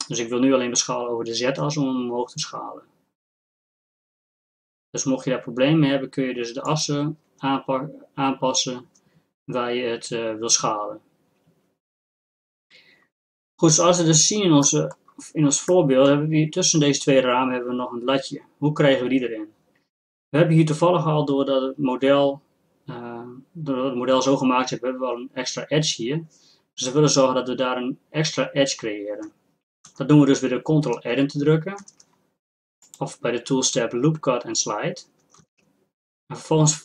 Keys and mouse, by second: 14.7-17.9 drag, 32.9-35.1 drag, 35.4 ctrl+r.